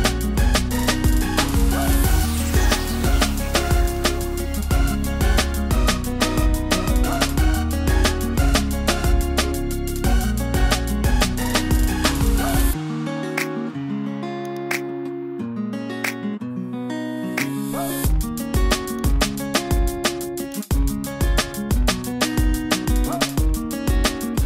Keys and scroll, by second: 14.8 super+t.